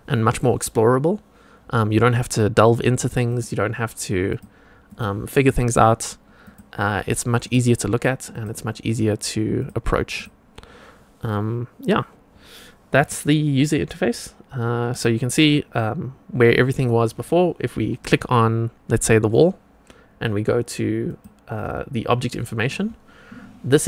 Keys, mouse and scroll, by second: 3.2 click, 4.2 click, 4.8 click, 5.6 click, 6.4 click, 7.3 click, 8.3 click, 9.5 click, 10.1 click, 13.0 click, 14.9 click, 18.9-21.3 drag.